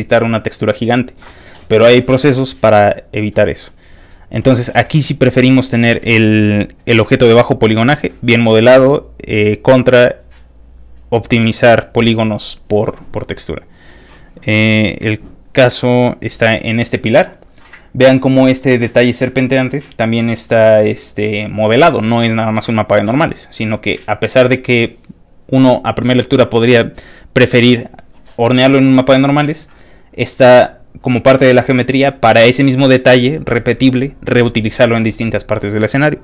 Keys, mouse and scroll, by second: 0.9 click, 1.4 click, 1.8 click, 2.5 click, 3.2 click, 3.8 click, 4.8 click, 6.3 click, 6.9 click, 7.5 click, 8.7 click, 9.7 click, 10.5 click, 11.4 click, 12.4 click, 14.3 click, 14.8 click, 15.3 click.